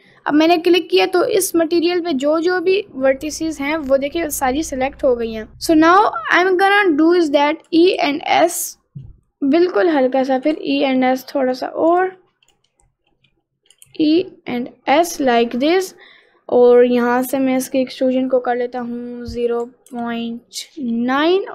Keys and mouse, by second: 1.5 middle click, 2.4 middle click, 2.9 middle click, 4.2 middle click, 5.3 g, 5.9 middle click, 7.7 e, 10.5 e, 12.0 ctrl+z, 12.5 ctrl+z, 13.8 e, 18.6-21.5 drag.